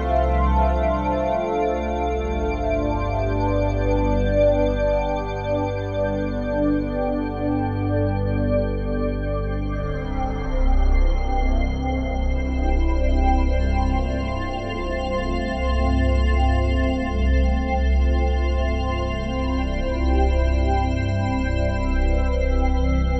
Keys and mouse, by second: 0.5 click, 2.6 click, 5.8 click, 6.2 click, 7.3 click, 9.3 shift+click, 10.0 shift+click, 11.2 shift+click, 12.9 click, 13.1-14.3 drag, 14.3 1, 15.5 click, 16.0 alt+shift+click, 17.3 n, 18.3 click, 19.0 click, 20.6 click, 22.2 click, 22.9 click.